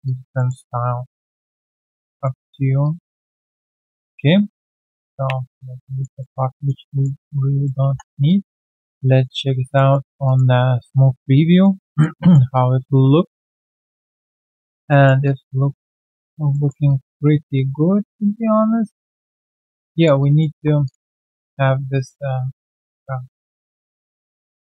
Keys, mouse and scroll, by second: 0.0 alt+click, 0.3 alt+middle click, 0.6 alt+right click, 2.2 alt+click, 2.2 alt+middle click, 2.5 Tab, 4.1 ctrl+click, 5.9 alt+click, 6.2 alt+middle click, 6.5 alt+click, 6.8 alt+middle click, 7.2 alt+click, 8.2 3, 8.2 alt+click, 8.9 alt+right click, 9.3 scroll down 1, 9.7 alt+click, 9.9 alt+middle click, 10.2 alt+click, 10.6 alt+right click, 11.6 alt+click, 12.1 alt+middle click, 12.5 alt+click, 14.2 alt+middle click, 14.5 alt+click, 14.9 alt+middle click, 15.2 alt+click, 15.8 alt+middle click, 16.1 alt+click, 16.5 alt+middle click, 16.8 alt+click, 19.3 alt+middle click, 19.7 alt+click, 21.0 alt+middle click, 23.4 alt+click, 23.8 alt+right click, 24.1 alt+click.